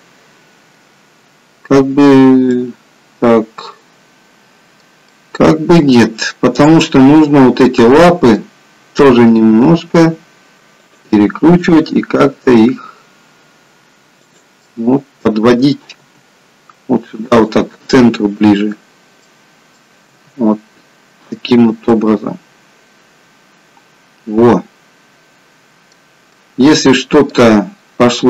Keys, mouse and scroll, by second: 2.7 middle click, 6.7 click, 7.3 middle click, 9.5 r, 11.9 g, 14.7 middle click, 16.3 g, 19.0 middle click, 20.1 g, 21.9 middle click, 26.5 middle click.